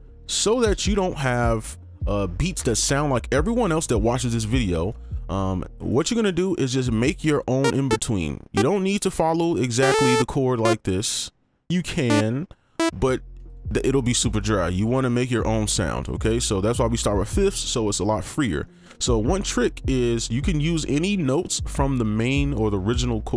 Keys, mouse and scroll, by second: 4.9 right click, 7.8 double click, 9.1 right click, 13.4 ctrl+click, 15.3 right click, 18.6 right click, 21.2 click.